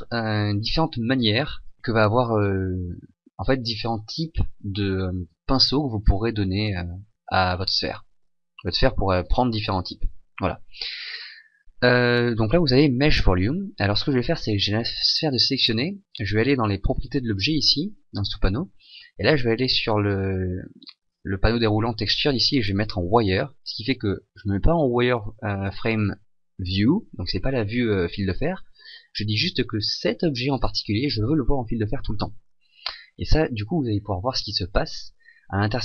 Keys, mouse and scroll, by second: 33.9-35.8 scroll up 5.